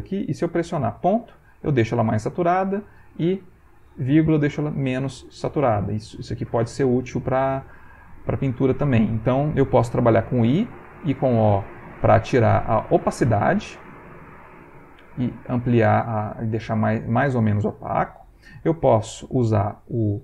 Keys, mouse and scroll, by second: 2.6 ,, 4.7 ,, 4.9 ., 5.8 ,, 6.2 ., 10.3 i, 11.0 o, 11.9 i, 13.0 click, 14.2 o, 15.0 click, 15.7 o, 16.1 click.